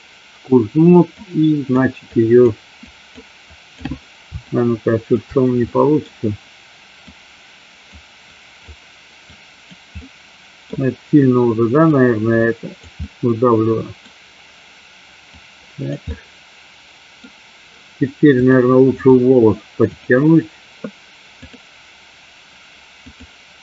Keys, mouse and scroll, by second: 1.2 click, 2.1 click, 3.0 click, 3.5 click, 4.5 shift+click, 5.6 middle click, 7.2 click, 8.4 click, 9.5 click, 10.1 middle click, 12.0 click, 13.1 middle click, 15.5 click, 16.2-17.4 middle drag, 18.5 click, 20.0 click, 21.4-23.5 drag.